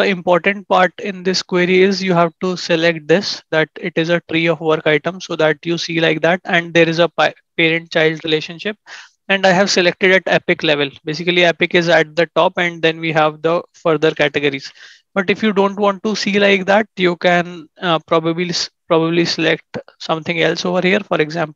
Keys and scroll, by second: 14.0 ctrl+shift+&, 17.3 ctrl+shift+@.